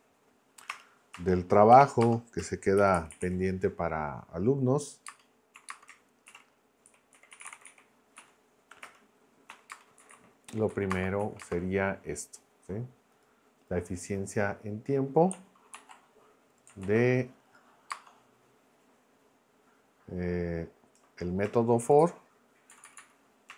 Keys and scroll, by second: 0.7 Return, 1.7-3.7 typing, 5.1 space, 6.3-11.4 typing, 8.8 Return, 10.7 Left, 11.2 Right, 15.7 super+c, 16.8 super+v, 17.9 space, 21.5-22.5 typing, 22.7 Left.